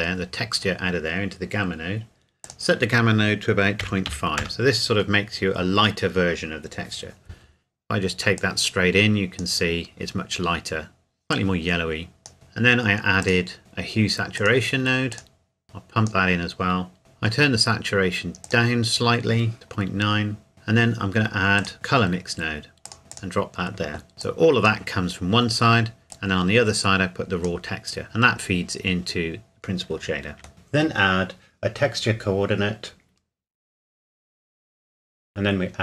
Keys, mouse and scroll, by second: 2.4 click, 3.8 KP_Decimal, 4.1 KP_5, 4.4 KP_Enter, 8.4 click, 11.6 click, 13.2 click, 15.4 click, 18.4 click, 21.6 click, 24.5 click, 26.4 click, 30.4 click, 30.5-31.0 scroll down 2, 31.0 click, 34.3 click.